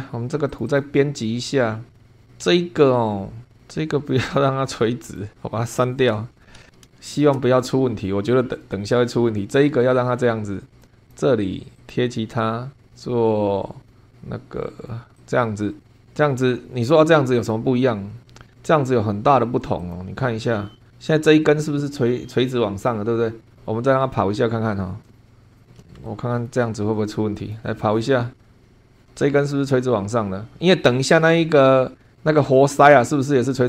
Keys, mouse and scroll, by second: 0.5 click, 2.1 scroll up 1, 5.0 click, 6.3 Delete, 6.4 scroll down 1, 6.9 shift+click, 8.5-10.9 drag, 11.1 click, 11.8 click, 15.2 click, 17.3 click, 18.2-18.5 scroll down 1, 19.8 click, 20.6 scroll up 1, 23.5-23.8 scroll down 1, 25.1 click, 25.5 click, 25.6 scroll down 2, 26.1-26.6 shift+middle drag, 27.4 click.